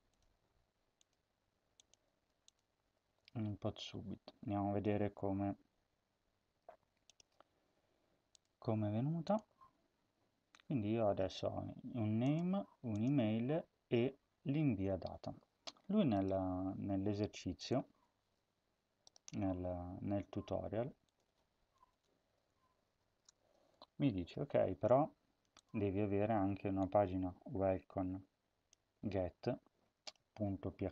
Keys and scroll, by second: 2.7 ctrl+s, 17.9 ctrl+c, 21.7 Return, 22.7-24.4 typing, 23.1 ctrl+v.